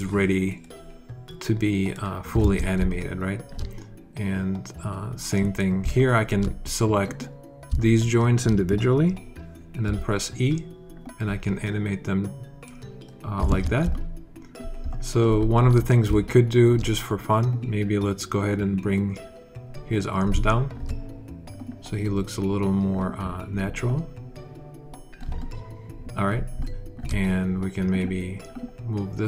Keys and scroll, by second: 2.3 super+z, 9.7 e, 13.3 super+z.